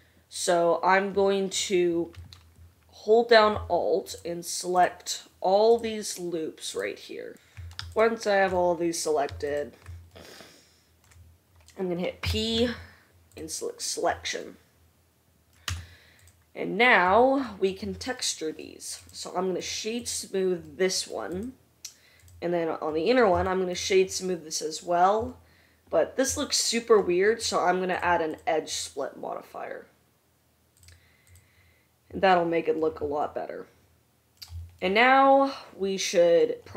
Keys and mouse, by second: 4.9 alt+middle click, 5.2 alt+click, 5.8 alt+middle click, 6.1-7.4 alt+drag, 6.9 alt+middle click, 6.9-7.9 alt+right drag, 7.4 ctrl+z, 8.0 alt+shift+middle click, 9.6 shift+middle click, 12.2 p, 15.8 Tab, 16.3 middle click, 18.9 right click, 19.1 middle click, 19.3-21.6 right drag, 21.6 middle click, 21.7 right click, 22.4 middle drag, 22.5-28.1 right drag, 28.1 middle click, 28.2 right click, 28.9-31.7 middle drag, 31.7-36.7 right drag.